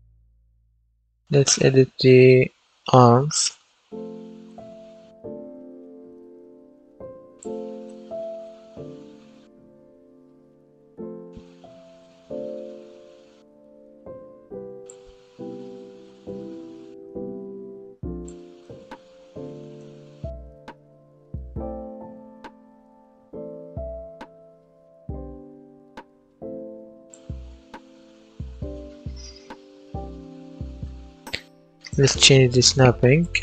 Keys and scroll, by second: 0.0-2.2 typing, 7.9 a, 8.3 w, 10.0-14.0 typing, 18.3-19.5 typing.